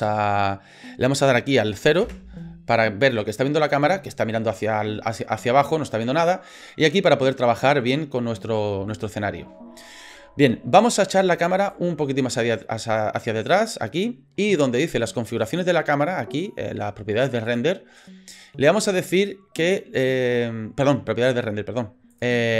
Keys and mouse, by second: 2.0 KP_0, 7.1 middle click, 9.0 shift+middle click, 11.8-13.6 drag, 17.5 click, 22.1 click.